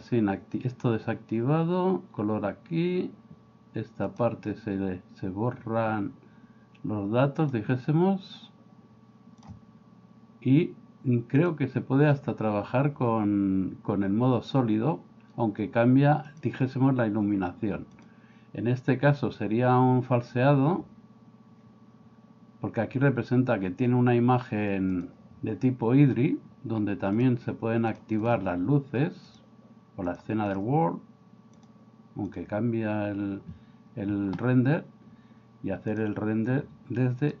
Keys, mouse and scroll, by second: 4.2-6.0 drag, 7.4-9.4 drag, 16.3 click, 18.0 click, 25.0-33.6 drag, 36.0-37.4 drag.